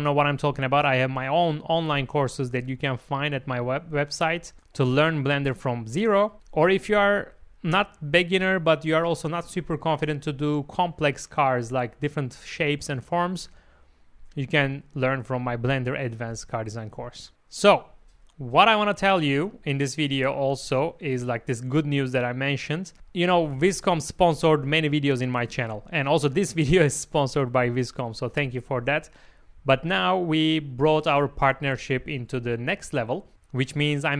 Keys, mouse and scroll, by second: 1.1 click, 1.9 alt+a, 2.2 shift+middle click, 4.3 click, 4.7 g, 4.9 g, 5.4 click, 6.1 g, 6.3 g, 7.7 Tab, 7.9-8.9 middle drag, 9.2 Tab, 9.8 ctrl+z, 10.3 ctrl+z, 10.7 click, 11.7 m, 13.7 click, 14.1 middle click, 15.8 click, 16.3-17.3 middle drag.